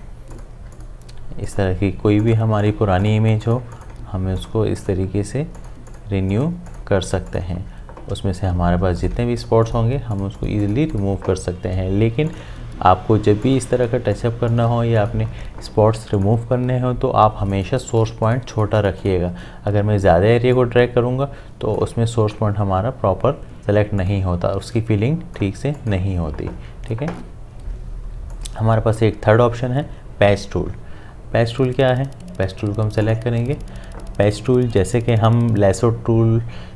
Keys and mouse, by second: 9.0 click, 16.2-25.8 drag, 28.3-31.5 drag, 33.0 click.